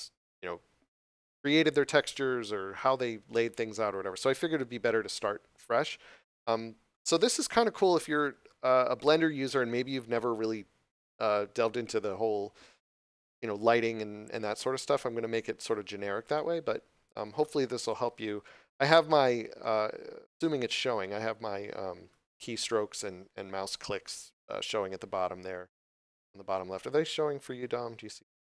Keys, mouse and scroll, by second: 7.0 scroll up 1, 7.8 shift+middle click, 16.2 middle click, 23.9 middle click.